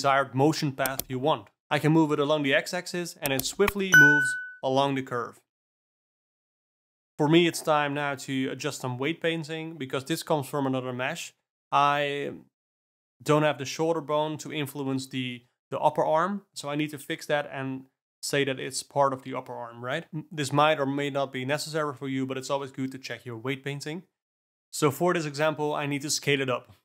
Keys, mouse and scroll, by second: 0.0 Tab, 0.2 Tab, 0.3 click, 0.5 click, 0.6 r, 1.5 g, 6.7 Tab, 6.8 alt+middle click, 7.2 click, 7.9 alt+middle click, 8.3 Down, 8.3 Down, 8.4 Up, 8.8 alt+middle click, 9.5 click, 9.8 alt+middle click, 10.0 ctrl+z, 10.6 middle click, 12.1 middle click, 12.1 click, 12.3 Up, 12.4 Down, 12.5 click, 12.7 ctrl+z, 13.0 Up, 13.3 click, 13.4 ctrl+z, 13.5-15.7 Up, 15.9-16.3 Down, 16.4 Up, 16.7 Down, 17.7 alt+middle click, 17.9 click, 18.1 ctrl+z, 18.5 Down, 18.7 Down, 18.8 Up, 19.0-19.6 Down, 19.7 Up, 19.9 Up, 19.9-20.3 Down, 20.8 click, 21.4-24.4 drag, 24.7 ., 26.1 s.